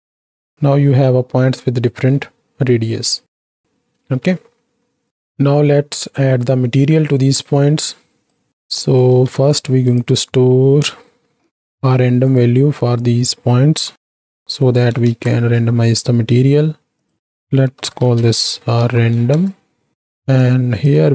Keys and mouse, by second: 3.7 ctrl+space, 5.1 click, 5.9 click, 7.4-8.5 right drag, 8.9 click, 9.3 shift+a, 13.1-17.1 drag, 17.2-19.5 drag, 20.5 click.